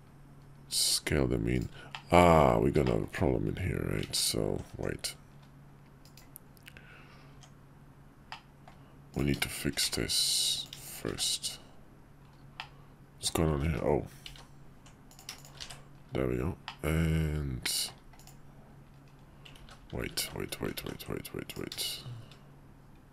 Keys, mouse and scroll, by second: 1.9 click, 2.9 shift+click, 4.1 ctrl+z, 4.7 Tab, 6.3 click, 8.3 Tab, 8.3 middle click, 9.1 click, 9.5 shift+click, 9.9 1, 10.6 click, 10.8 shift+click, 11.1 1, 12.6 click, 13.6 ctrl+z, 13.7 ctrl+z, 14.4 ctrl+z, 15.1 click, 15.4 shift+click, 15.7 1, 16.7-17.9 middle drag, 18.2 click, 19.6 ctrl+z, 20.2 ctrl+z, 20.6 ctrl+z, 20.8 ctrl+z, 21.5 click, 21.8 shift+click.